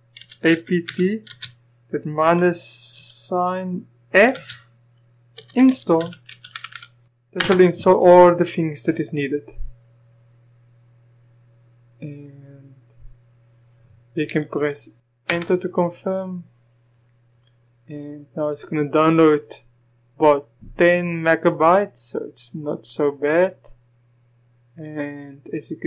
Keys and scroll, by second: 0.0-2.9 typing, 4.3 typing, 5.3-7.4 typing, 15.3 Return.